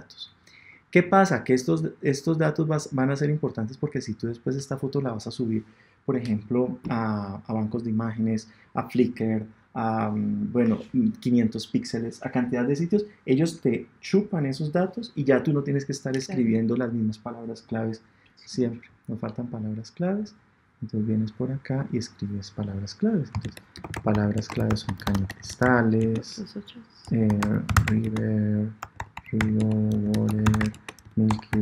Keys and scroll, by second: 31.2 BackSpace.